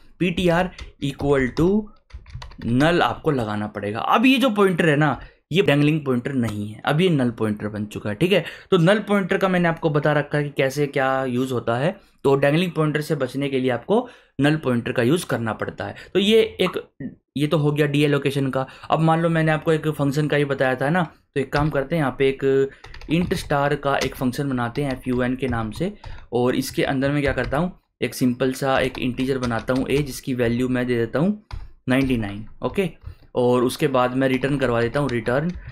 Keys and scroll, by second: 0.0-3.3 typing, 5.1 ;, 21.6 Return, 22.6-26.0 typing, 26.6 Right, 27.2 shift+[, 27.4 Return, 28.5-32.7 typing, 33.0 Return, 34.1-35.7 typing.